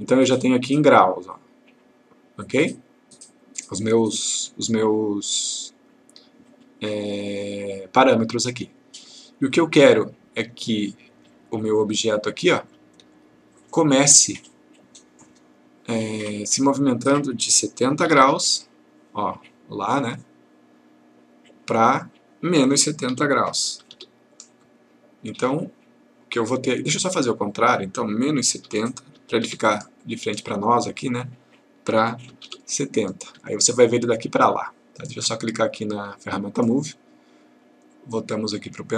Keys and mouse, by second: 9.8-10.5 click, 17.9 7, 22.1 click, 23.1 -, 27.6 click, 28.7 typing, 30.0 click, 32.1-33.0 typing, 32.9 click, 36.2 click, 38.0 click.